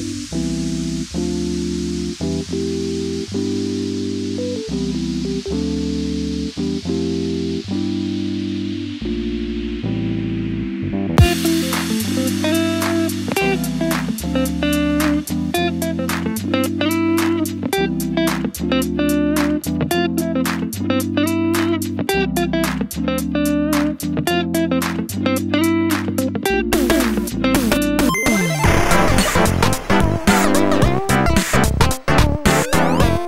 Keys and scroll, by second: 25.7 BackSpace, 25.9 BackSpace, 26.1 BackSpace, 26.9 shift+b, 30.5 ctrl+c, 30.7 ctrl+v, 31.3 shift+☒, 31.6 shift+Right.